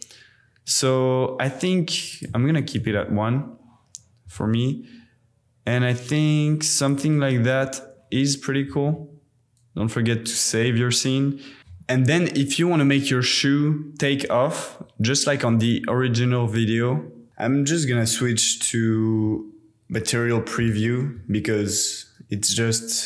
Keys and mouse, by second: 0.6 click, 2.1 click, 4.3 r, 4.6 r, 6.9 click, 9.2 super+s, 12.4-14.4 drag, 17.3 z, 19.3 z.